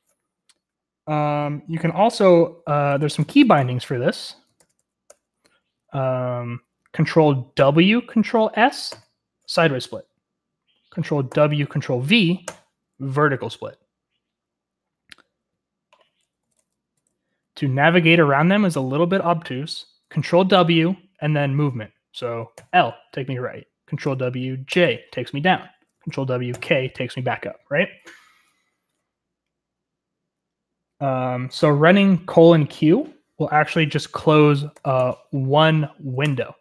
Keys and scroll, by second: 0.0-0.7 typing, 2.6-5.6 typing, 7.6 ctrl+w, 7.6 typing, 8.7-9.4 typing, 11.0-11.8 typing, 12.5 ctrl+v, 16.4-17.4 typing, 20.5 ctrl+w, 22.5 l, 24.1 ctrl+w, 24.7 j, 26.1 ctrl+w, 26.5 k, 34.7-35.4 typing, 36.2 Return.